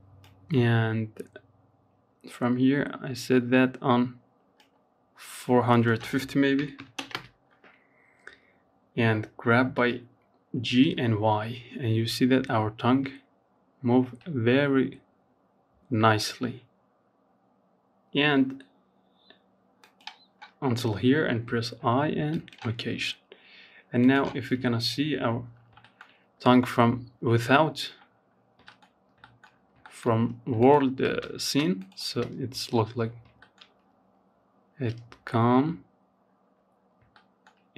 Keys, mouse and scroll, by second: 3.9-6.3 drag, 6.3-7.9 scroll down 1, 7.9 g, 22.2-23.7 drag, 23.7 scroll down 2, 24.0 shift+middle click, 24.2 scroll up 2, 24.6 shift+middle click, 24.9-25.7 scroll up 1, 25.7-26.4 scroll down 4, 26.4-26.8 scroll up 2, 26.8 shift+middle click, 27.6 scroll up 3, 28.0 shift+middle click, 28.7 click, 29.2 space, 29.7 space, 30.0 click, 30.3 space, 31.3 scroll up 3, 31.6-34.3 shift+middle drag, 34.3-34.9 scroll down 4, 34.9-35.3 scroll up 2, 35.3-37.7 shift+middle drag.